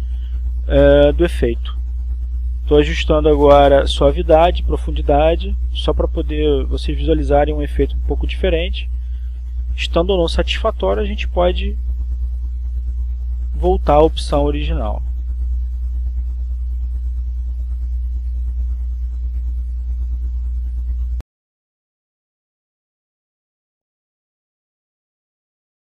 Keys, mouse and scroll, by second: 1.3-2.8 drag, 3.1 4, 3.6 Return, 6.9 click, 8.7 click, 10.1 2, 10.5 Return, 12.1 click, 15.4 2, 15.8 Return, 17.6-19.1 drag, 19.3-20.9 drag, 20.9 1, 21.8 Return.